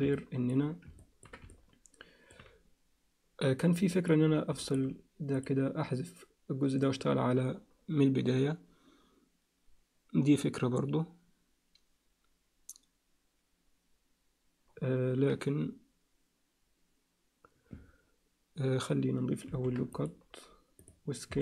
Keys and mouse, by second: 0.1 ctrl+alt+middle click, 1.0 ctrl+alt+middle click, 1.5 alt+middle click, 3.9 alt+shift+middle click, 4.6 alt+middle click, 5.4-8.1 drag, 19.5 ctrl+r, 21.3 s.